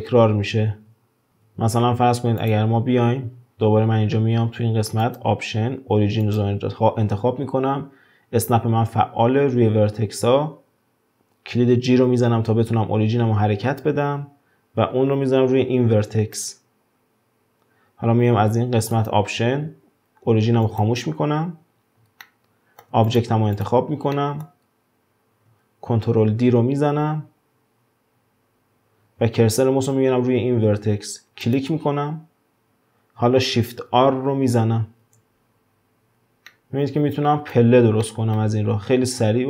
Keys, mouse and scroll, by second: 0.1-1.3 middle drag, 0.1 shift+r, 1.3 ctrl+z, 1.7 ctrl+z, 2.4 click, 3.0-5.0 scroll up 1, 5.0-8.1 drag, 10.6-11.9 scroll up 1, 11.9 g, 18.9-21.9 drag, 22.2-23.1 shift+middle drag, 23.1 drag, 23.6 click, 24.1 middle click, 24.6-26.3 scroll down 2, 26.3 shift+d, 32.1-33.7 scroll down 2, 33.7 shift+r, 34.1 shift+r, 35.4-36.5 scroll down 3, 36.5-38.6 middle drag, 38.6-39.4 scroll up 1.